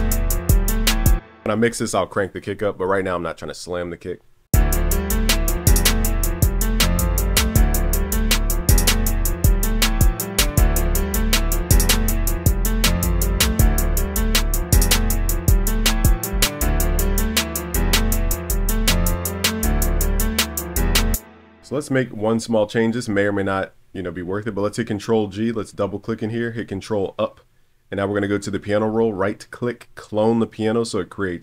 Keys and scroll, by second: 5.8 super+s, 12.9 Return, 16.0 Return, 16.1 super+s, 19.3 super+b, 24.5 super+g, 26.4 super+Up.